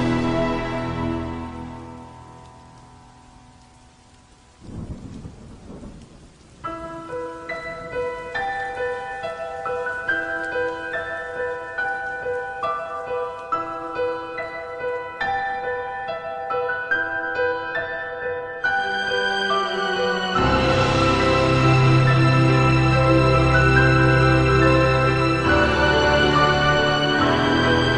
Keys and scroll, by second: 6.6 +.